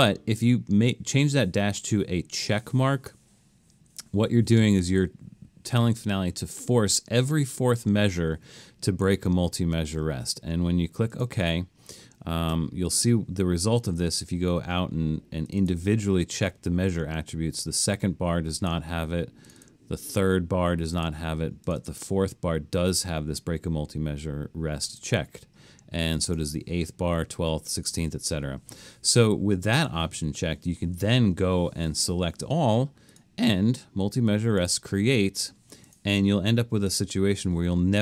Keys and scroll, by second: 30.9 super+a.